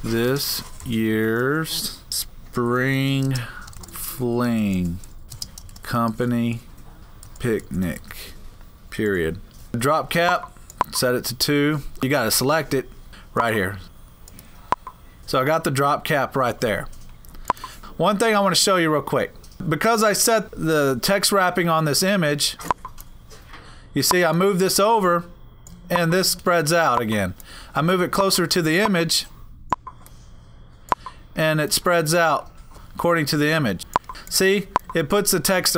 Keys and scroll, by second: 0.0-9.2 typing.